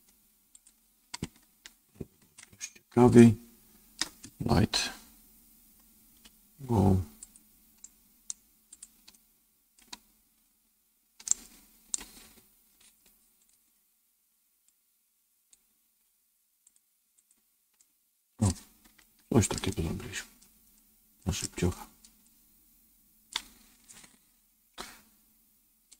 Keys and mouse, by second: 3.1 shift+middle click, 7.9 right click, 8.7 click, 9.0 middle click, 11.2 middle click, 16.5 click, 17.1 click, 17.7 middle click, 18.9 shift+middle click, 19.6 middle click, 20.7 middle click, 22.2-23.2 middle drag.